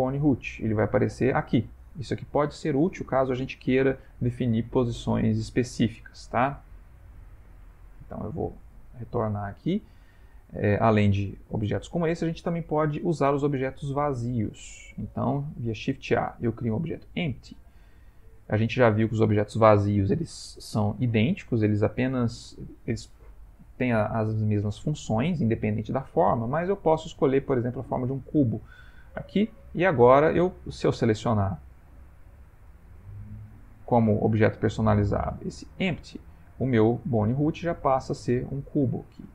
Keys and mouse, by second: 6.8 click, 7.9 click, 9.0 ctrl+middle click, 10.5 middle click, 10.7 middle click, 10.8 ctrl+middle click, 11.1 click, 11.5 x, 12.7 middle click, 12.8 middle click, 13.5 middle click, 13.6 ctrl+middle click, 13.8 ctrl+middle click, 14.1 middle click, 14.3 middle click, 15.0 shift+a, 30.3 click, 31.1 middle click, 33.8 click, 37.3 middle click, 38.1 middle click, 38.3 ctrl+middle click, 38.9 ctrl+middle click, 39.1 ctrl+middle click, 39.1 middle click.